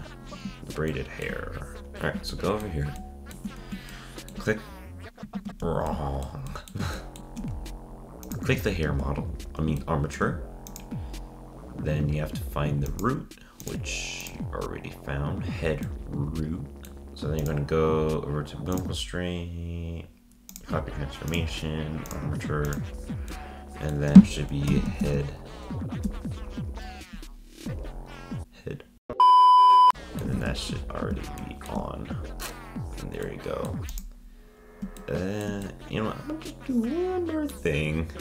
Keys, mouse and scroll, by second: 0.9-1.4 shift+middle drag, 1.4-1.9 scroll up 3, 2.3-5.3 shift+middle drag, 5.3 ctrl+Tab, 7.2-8.2 shift+middle drag, 8.2 click, 8.9 ctrl+Tab, 9.8-10.7 shift+middle drag, 10.7-11.1 drag, 12.9 click, 13.6 click, 14.2 click, 15.8-17.0 middle drag, 17.4 click, 18.7-25.7 drag, 29.9 middle click, 30.3 ctrl+Tab, 30.7-31.4 scroll up 1, 31.4-32.1 shift+middle drag, 32.1-33.2 scroll up 2, 33.2-33.9 middle drag, 33.9 click, 35.0-38.2 shift+middle drag.